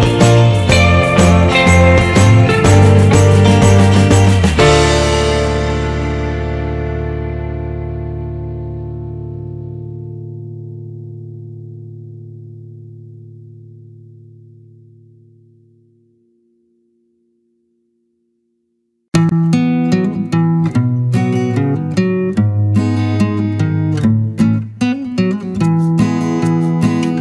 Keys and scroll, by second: 3.0 ctrl+=, 8.5 ctrl+z.